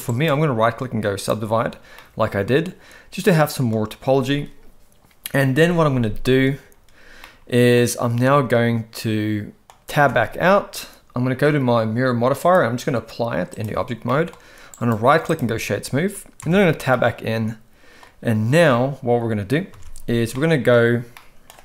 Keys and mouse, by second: 0.1-1.3 right drag, 2.0-3.7 middle drag, 7.2-7.8 middle drag, 9.6 middle click, 10.0 Tab, 12.4-13.6 drag, 14.1 middle click, 14.8-15.4 right drag, 16.4 Tab, 16.9-18.0 middle drag, 19.7 alt+a, 20.3 middle click.